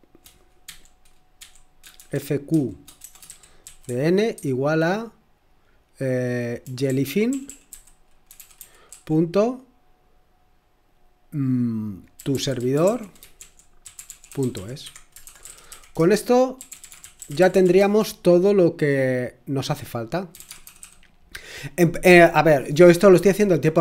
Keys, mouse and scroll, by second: 0.7-4.9 typing, 6.4-9.4 typing, 12.0-18.1 typing, 20.1-21.3 typing, 23.3-23.8 typing.